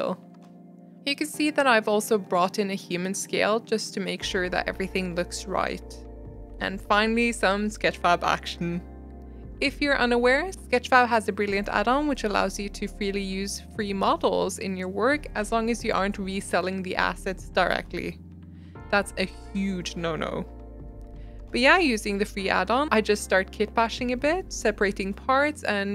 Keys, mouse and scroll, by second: 0.1 g, 0.9 shift+middle drag, 0.9 Tab, 1.2 click, 1.5 2, 1.6 click, 1.7-2.3 middle drag, 2.3 click, 2.8 alt+z, 2.9 middle click, 3.3 shift+click, 3.5 alt+z, 3.6 g, 5.1 click, 5.3 g, 5.7 Tab, 5.8 middle click, 6.2 scroll up 1, 6.5-9.9 typing, 6.8 middle click, 6.8 scroll up 3, 7.0 shift+middle click, 7.1 scroll down 2, 7.4 middle click, 7.7 middle click, 9.2 middle click, 9.2 scroll up 1, 9.3 middle click, 9.4 scroll down 2, 11.0 g, 11.3 g, 11.6 middle click, 11.7 scroll down 1, 11.7-12.2 middle drag, 12.2 scroll up 3, 12.4-13.0 scroll down 3, 13.0 alt+d, 13.9 middle click, 14.0 scroll down 3, 14.0 middle click, 14.1-14.7 scroll up 3, 14.3 middle click, 14.4 click, 14.5 middle click, 14.7 shift+middle click, 15.1 ctrl+s, 15.6 click, 16.2 click, 16.5 click, 17.1 middle click, 17.2 scroll down 1, 17.3-21.2 typing, 17.5 middle click, 17.8 middle click, 17.8 scroll up 2, 17.9 shift+middle drag, 18.4 middle click, 19.1 middle click, 19.9 middle click, 20.4-20.8 middle drag, 21.4 scroll up 5, 21.6 scroll down 1, 23.6 shift+middle click, 23.9 g, 24.3 alt+d, 25.0 alt+z, 25.1 scroll up 1, 25.3 shift+middle click, 25.4 g.